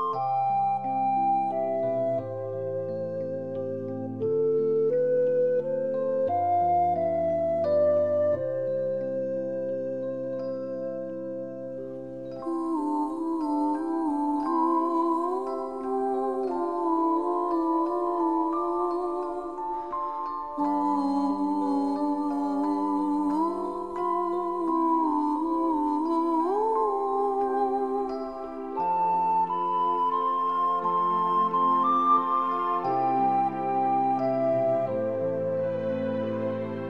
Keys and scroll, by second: 5.7 typing, 7.4 typing, 14.0-14.7 typing, 18.3 typing, 20.5 typing.